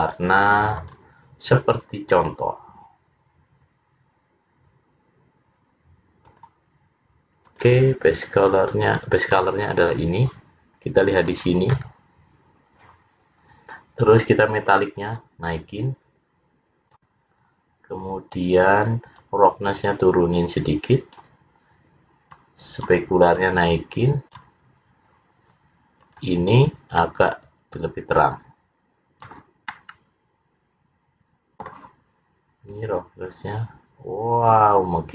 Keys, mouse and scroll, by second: 0.9 click, 6.3 click, 12.2 click, 14.7 click, 17.6-18.9 scroll down 2, 19.2 click, 22.5 click, 23.5 click, 26.2 click, 29.9 middle click, 32.8 click.